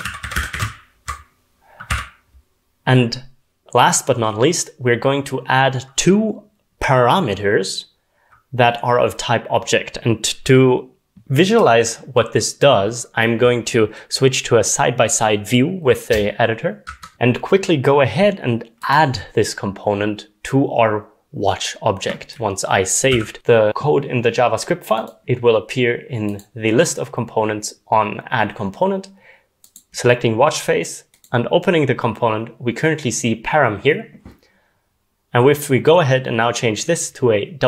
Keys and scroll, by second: 0.0-1.4 typing, 16.9 super+Left, 23.1 ctrl+s, 23.7 ctrl+s, 35.3 w.